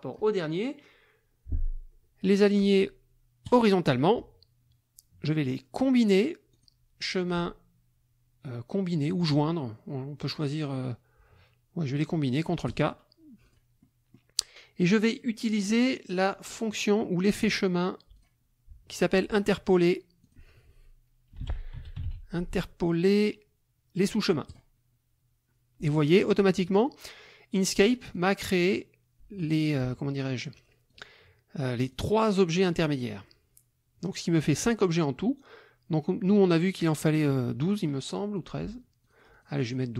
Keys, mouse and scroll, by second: 3.4 click, 6.5 click, 12.7 click, 13.5 click, 13.8 middle click, 15.5 click, 17.4 click, 18.1 click, 20.2 click, 21.1-22.6 typing, 24.5 click, 26.1 click, 28.1 click, 30.9 click, 31.9 click, 32.5 click, 39.0 click.